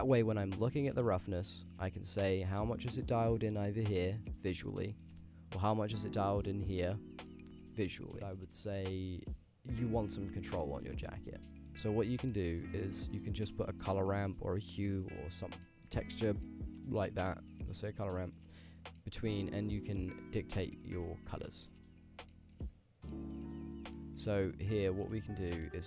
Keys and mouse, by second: 1.0 middle click, 1.8-3.9 drag, 4.3-5.6 drag, 6.1 ctrl+shift+click, 6.9-7.8 drag, 9.9 click, 10.1-10.9 middle drag, 11.5 middle click, 12.0 middle click, 12.6 click, 12.8 g, 13.5 middle click, 13.8 shift+a, 20.2-23.2 drag, 23.7 click, 24.3 click, 25.0 click, 25.7-25.8 drag.